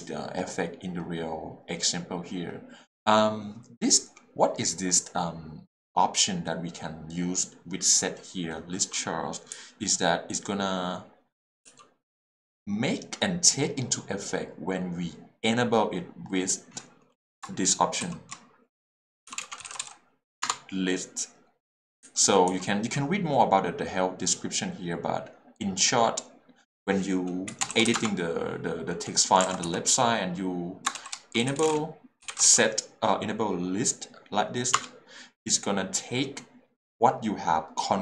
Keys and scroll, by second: 9.5 h, 19.3-20.4 typing, 22.0 j, 27.5 Escape, 27.9 q, 27.9 Return, 29.4 alt+Return, 29.4 alt+a, 29.7 h, 31.4-32.4 typing, 34.7 t, 34.8 Return.